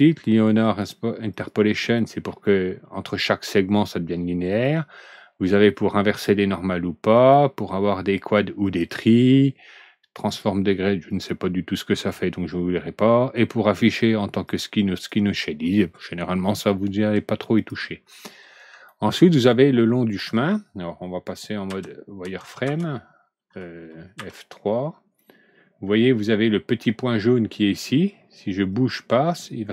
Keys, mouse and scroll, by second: 0.6 click, 1.2 click, 1.9 click, 4.4 click, 6.1 click, 7.1 click, 8.6 click, 10.1 click, 11.0 click, 14.4 click, 14.9 click, 17.5 click, 18.6 alt+Right, 18.8 middle click, 20.1 middle click, 21.6 F3, 22.6 F4, 24.1 F3, 25.2 middle click, 25.8 middle click, 26.3 middle click, 28.6-29.7 drag.